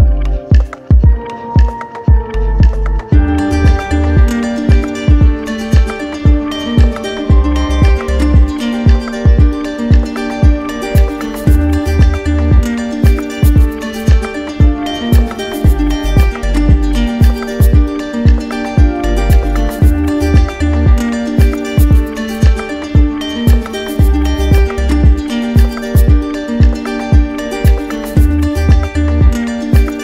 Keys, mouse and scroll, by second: 4.1 click, 5.3 shift+click, 6.1 shift+click, 6.7 shift+click, 7.0 shift+click, 8.4 click, 12.2 click, 13.7-15.3 typing, 15.3 Return, 17.2-18.3 drag, 18.6-19.8 drag, 20.8-24.4 typing, 26.1 click, 28.2 click, 28.5 shift+click, 29.3 alt+click.